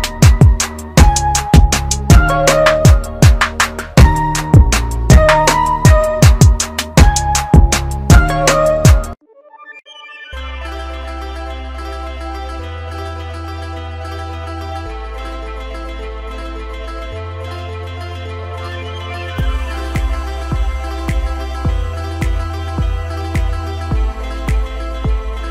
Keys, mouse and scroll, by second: 5.7 click, 12.3 click, 19.4 click, 23.2 click.